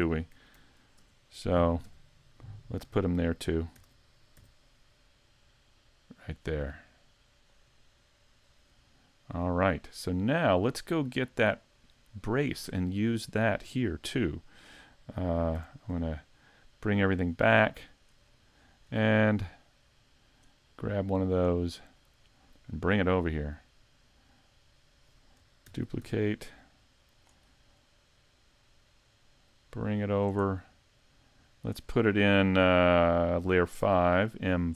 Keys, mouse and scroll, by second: 1.0 ctrl+KP_3, 1.8 KP_5, 3.8 shift+d, 7.4 click, 8.5-8.9 scroll up 2, 8.9 shift+middle click, 10.0-10.9 scroll down 5, 11.0 middle click, 16.1-16.6 scroll down 2, 16.5 middle click, 17.3 scroll up 4, 17.7 shift+middle click, 18.2 scroll down 4, 18.6 scroll up 2, 19.0 shift+middle click, 19.6 middle click, 21.5 right click, 21.9-22.2 scroll down 4, 22.4 middle click, 25.8 shift+d, 27.2 click, 27.4-27.8 scroll down 5, 27.8 middle click, 29.5 click, 31.1 click, 33.6 m.